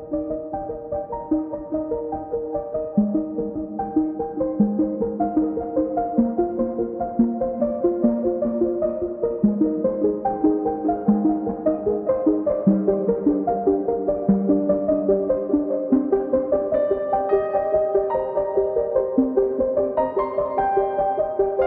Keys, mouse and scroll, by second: 0.4 click, 1.3 KP_Decimal, 5.2 alt+shift+click, 6.2 click, 8.2 alt+click, 10.7 alt+shift+click, 20.3 alt+shift+click.